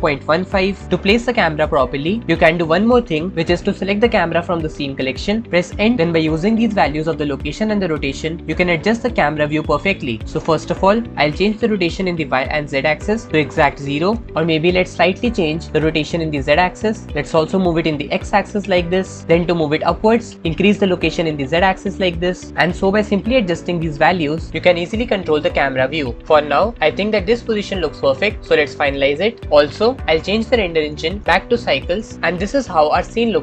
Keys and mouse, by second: 1.4-5.1 right drag, 12.0-13.9 middle drag, 15.7 right click, 16.1 middle click, 16.2-17.8 right drag, 17.8 middle click, 18.7 middle click, 21.3 click, 21.5 middle click, 22.8 right click, 23.2 middle click, 23.5 middle click, 24.5 middle click, 26.2-26.8 middle drag, 26.8 shift+click, 27.0 shift+middle click, 27.4-31.2 shift+middle drag, 31.2 click.